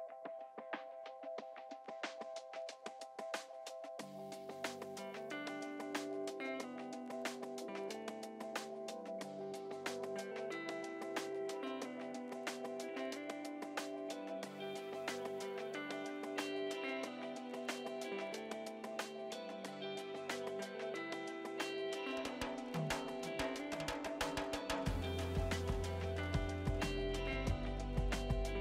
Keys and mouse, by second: 1.3 Delete, 2.3 click, 2.8 Delete, 3.5 click, 4.0 Delete, 4.4 click, 5.1 Escape, 5.8 click, 6.4 click, 8.6 click, 9.2 ctrl+click, 10.2 ctrl+shift+x, 10.4 click, 11.8 shift+click, 12.7 ctrl+click, 14.2 ctrl+click, 14.6 click, 20.7 Pause, 21.1 click, 21.7 Escape, 21.8 click.